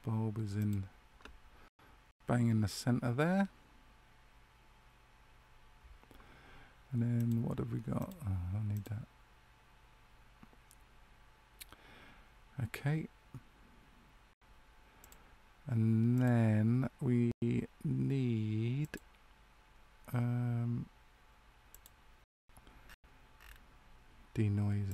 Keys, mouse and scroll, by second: 0.5 click, 7.1 click, 15.0 click, 22.6 scroll down 3, 24.6 scroll down 6, 24.8 click.